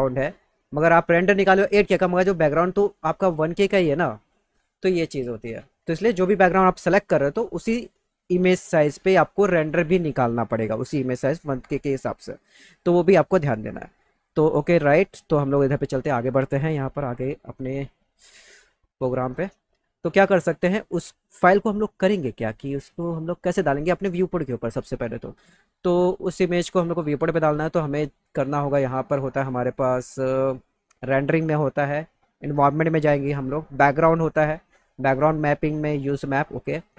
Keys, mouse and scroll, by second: 2.3-3.2 scroll up 4, 4.7-5.2 scroll down 6, 15.5 click, 30.5 click, 32.3 click, 36.0 click, 36.7 click.